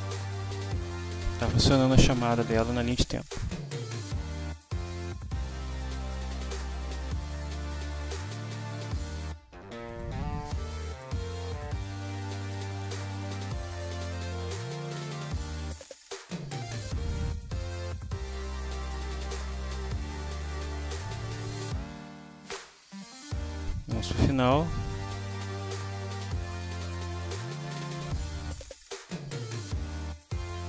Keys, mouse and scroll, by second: 4.5 click, 9.9 click, 11.4 click, 13.4 click, 14.0 click, 16.0-17.2 drag, 18.0-20.1 drag, 20.9-23.9 drag, 25.1 click, 27.9 click, 29.8 click.